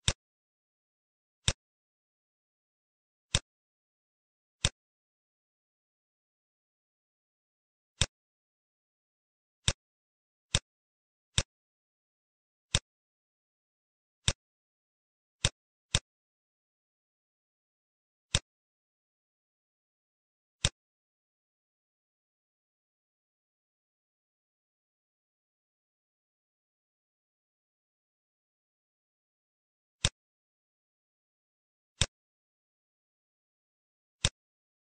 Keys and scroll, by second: 3.0 t, 3.7 ctrl+a, 5.1 Caps_Lock, 6.4 BackSpace, 6.7 s, 6.9 a, 15.1 ctrl+z, 17.7 ctrl+d, 20.2 t, 22.0 a, 22.7 BackSpace, 24.0 Insert, 24.2 Delete, 25.0 shift+s, 25.4 a, 25.6 h, 26.4 BackSpace, 26.9 Caps_Lock, 27.4-28.9 typing, 31.0 ctrl+d, 33.8 t.